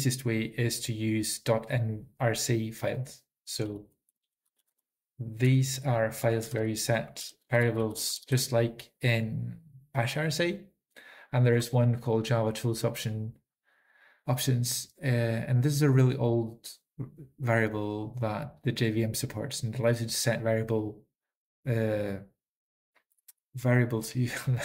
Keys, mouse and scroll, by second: 4.7-5.4 typing, 7.5-9.3 typing, 8.3 ctrl+s, 8.3 ctrl+n, 19.5-20.2 typing.